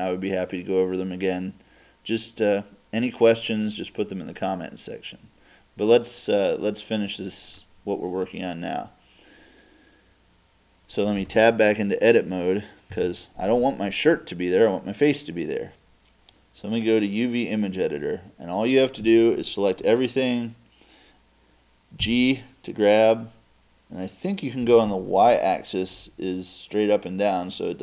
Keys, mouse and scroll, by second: 4.2 middle click, 4.2 scroll down 1, 4.4-4.8 scroll up 1, 4.8 middle click, 4.8 scroll down 1, 5.1-7.6 middle drag, 7.6 right click, 9.6-13.0 middle drag, 13.0 Tab, 22.1 g.